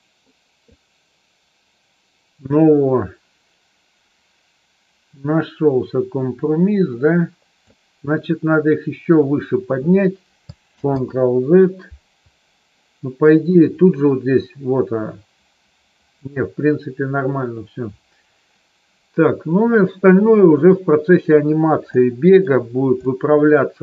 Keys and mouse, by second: 0.8-7.7 drag, 10.8 ctrl+z, 21.9 middle click, 23.0 middle click.